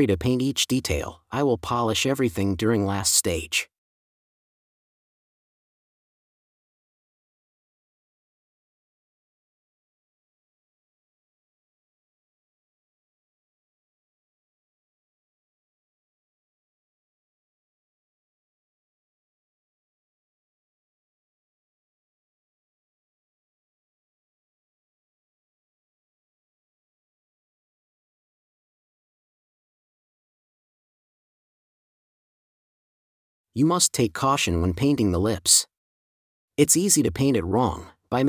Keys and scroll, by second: 0.5 space, 1.4 super+space, 8.3 space, 14.8 space, 21.3 4, 24.4 4, 25.9 space, 27.8 space, 30.1 4, 33.7 1, 36.1 space, 36.8 4.